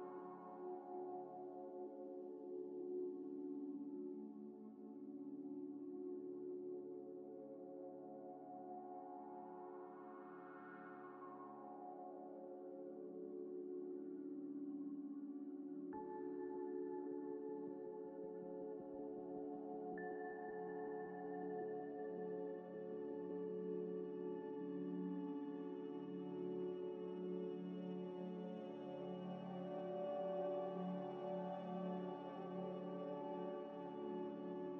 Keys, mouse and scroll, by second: 0.1 g, 0.2 y, 0.5 g, 1.0 Tab, 1.7 Tab, 2.0 a, 3.1 g, 3.7 s, 4.8 s, 5.5 g, 5.5 y, 6.8 s, 7.2 Tab, 7.9 z, 8.3 z, 8.6 z, 8.6 z, 13.4 shift+click, 14.3 double click, 19.8 scroll up 1, 20.1 middle click, 23.4 scroll down 1, 24.3 scroll up 1, 26.0 middle click, 29.2 double click, 33.6 scroll up 1, 34.2 scroll down 1.